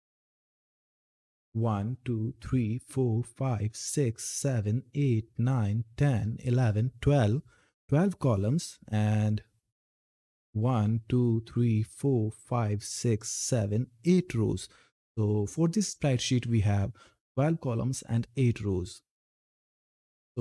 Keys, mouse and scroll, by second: 8.4 Down, 11.0 scroll down 1, 19.5 click.